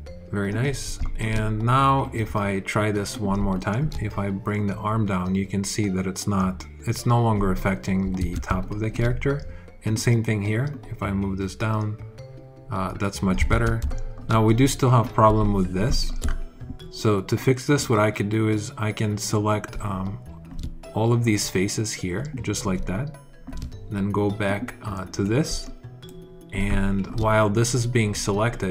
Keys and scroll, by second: 8.0 super+z, 13.3 super+z.